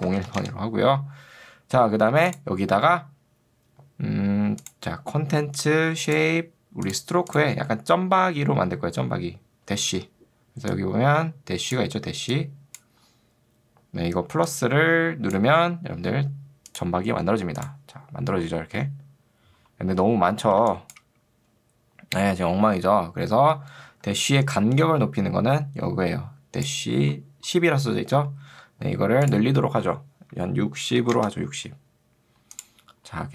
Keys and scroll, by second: 0.0-0.7 typing, 10.0 ctrl+2, 15.6 Escape, 20.6 space, 24.2 ctrl+2, 28.6 Escape, 31.0 0, 31.2 Return.